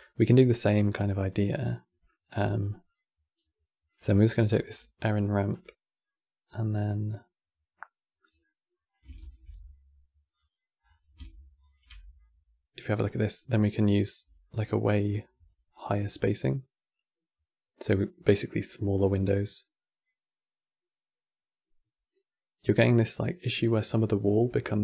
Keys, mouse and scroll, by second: 0.0 scroll down 5, 0.4-2.6 middle drag, 2.6 click, 3.6 click, 3.9-4.4 middle drag, 4.4-4.7 scroll down 3, 4.7 middle click, 5.2 click, 5.7-8.6 middle drag, 8.6 click, 8.9 ctrl+shift+d, 10.3 middle click, 10.5 scroll up 9, 11.3 ctrl+shift+click, 11.7-12.7 middle drag, 12.7 scroll up 5, 13.3-13.7 scroll down 2, 14.1-15.4 shift+middle drag, 15.4-18.4 drag, 18.9-22.0 drag, 24.7-24.8 shift+drag.